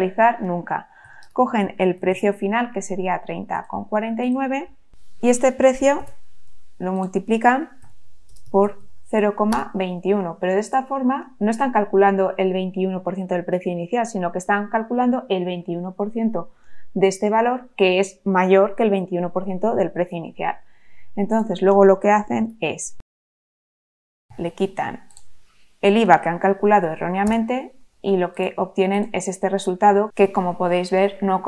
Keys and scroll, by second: 0.8-2.6 typing, 5.9 shift+0, 7.5-9.3 typing, 9.5 Return, 22.4 shift+0, 24.3 -, 27.2 Return.